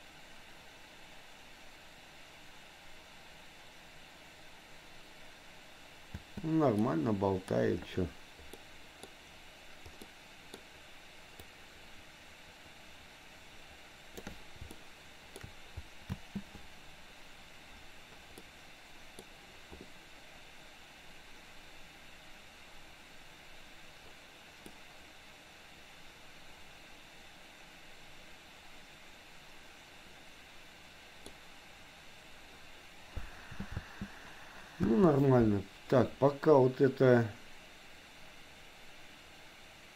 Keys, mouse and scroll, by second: 6.1 space, 6.8 middle click, 8.6 middle click, 10.1 middle click, 11.5-14.5 drag, 14.8 shift+middle click, 16.2 space, 18.6 middle click, 19.1 middle click, 24.8 middle click, 26.2 middle click, 27.1 middle click, 27.5-31.5 middle drag, 33.7 space, 33.8 space.